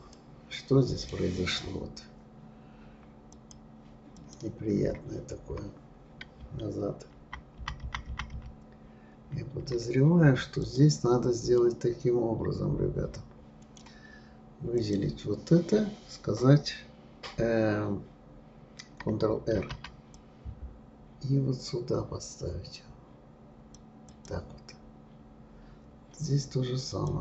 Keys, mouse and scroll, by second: 0.1-3.1 middle drag, 3.3 click, 4.1 click, 7.2 ctrl+z, 7.6 ctrl+z, 7.9 ctrl+z, 8.1 ctrl+z, 8.3 ctrl+z, 10.6 click, 11.6-14.6 middle drag, 14.8 click, 19.6 ctrl+r, 24.7-26.9 scroll up 4, 26.9 click.